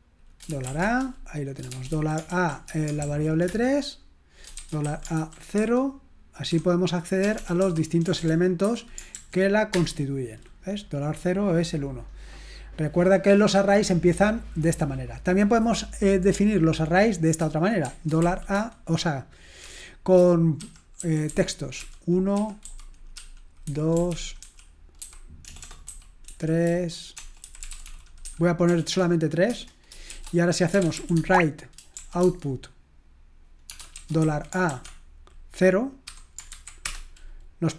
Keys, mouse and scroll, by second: 0.6-9.7 typing, 19.4-28.7 typing, 29.5 Return, 29.9-32.5 typing, 34.7 typing, 36.6-37.3 typing.